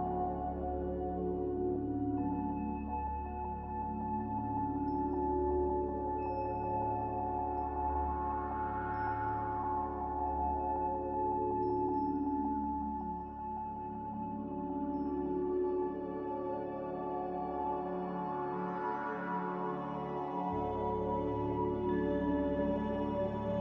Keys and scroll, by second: 5.4-6.2 typing, 9.5 ctrl+a, 12.5 a, 16.2-18.0 typing.